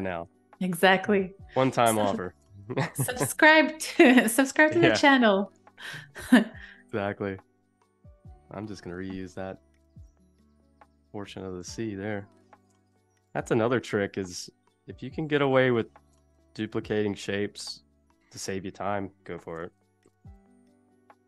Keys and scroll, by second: 2.9 space, 8.8 a, 9.8 space, 11.8 a, 15.1 super+z, 19.6 Left, 20.8 space.